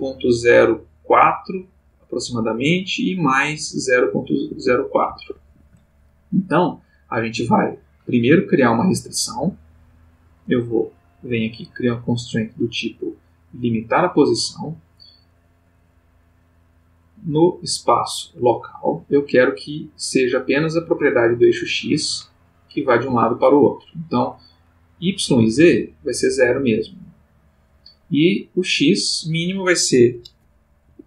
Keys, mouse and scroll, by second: 4.5 shift+', 5.1 shift+Escape, 10.5 click, 11.3 click, 13.9 click, 15.9 click, 18.1 click, 21.5-23.6 drag, 23.1 Escape, 24.9 click, 25.8 click, 27.4 click, 28.8 click, 29.2 click, 30.9 Escape.